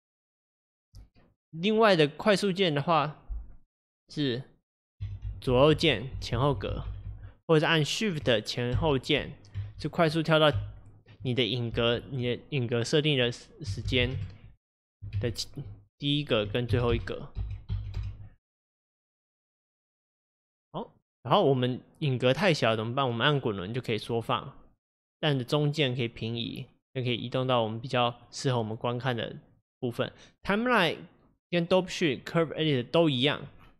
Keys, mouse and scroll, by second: 0.1 alt+scroll down 4, 0.3-0.7 alt+scroll up 4, 5.0 Left, 5.3 Left, 5.6 Left, 5.8 Left, 6.1 Right, 6.3-6.9 Right, 7.1 Right, 8.7 shift+Left, 9.6 shift+Right, 10.5 shift+Left, 16.2 click, 16.7 shift+Left, 16.9 shift+Right, 17.4 shift+Left, 17.6 shift+Right, 17.9 shift+Left, 19.2-33.7 drag.